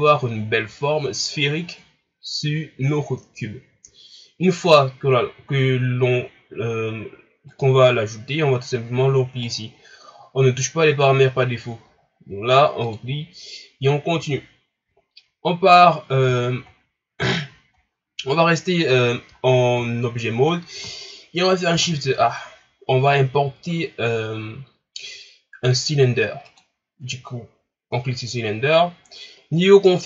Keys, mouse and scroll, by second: 7.5-12.6 drag, 12.8-15.9 drag, 16.4-17.4 shift+scroll down 2, 17.4-19.1 shift+scroll up 1, 19.4-21.7 ctrl+scroll down 1, 21.7 shift+a.